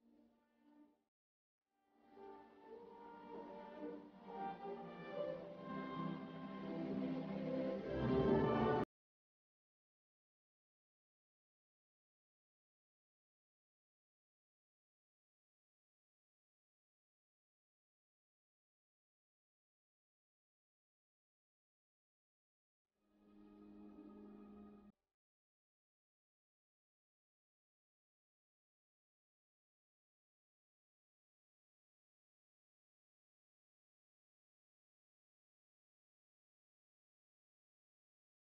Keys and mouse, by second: 0.4 click, 1.1-2.3 right drag, 3.1 KP_Divide, 5.2-7.6 drag, 7.8-11.8 drag, 10.2-11.8 right drag, 11.8 KP_0, 12.5 click, 13.4 r, 16.0 r, 18.4-20.7 right drag, 18.4 g, 20.7 r, 26.6-27.8 drag, 26.6-27.8 right drag, 28.1-29.9 drag, 31.4 KP_3, 35.2-36.3 middle drag, 36.3 click, 36.8 middle click, 37.1 right click, 37.4 middle click, 37.5-38.6 drag.